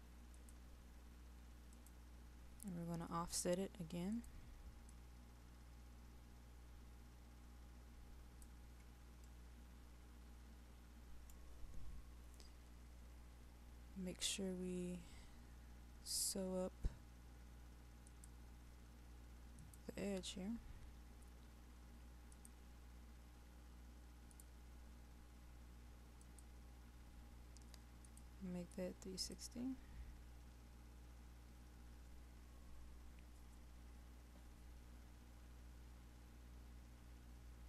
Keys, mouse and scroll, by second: 13.0-13.8 scroll up 1, 13.8-18.1 scroll down 1, 18.1-30.0 drag.